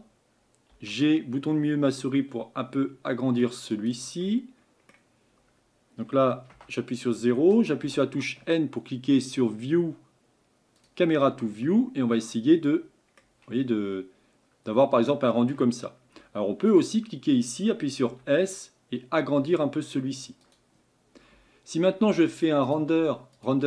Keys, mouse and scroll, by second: 0.8 g, 4.2-6.5 middle drag, 6.5 KP_0, 10.9-12.4 drag, 12.4-16.8 middle drag, 16.8 click.